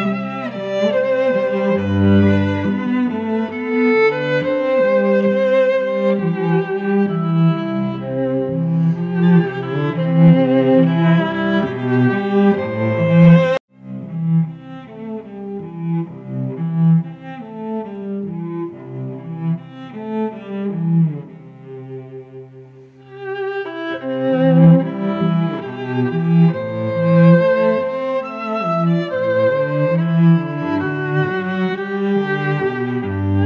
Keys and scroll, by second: 6.0 space, 6.6 v, 13.3 Return, 13.9 ctrl+t, 15.7 Return, 27.1 Return, 29.2 ctrl+t, 31.7 Return, 32.9 Tab, 33.2 space.